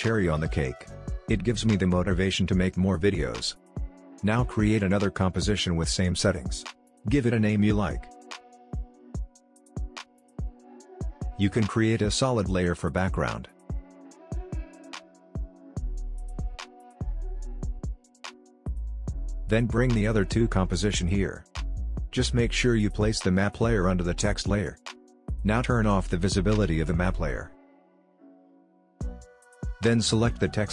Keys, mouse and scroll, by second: 1.8 click, 7.4-8.7 typing, 9.1 Return, 10.8 click, 11.9 right click, 12.5 click, 15.8 shift+b, 16.0 shift+g, 16.5 Return, 19.0-29.8 drag.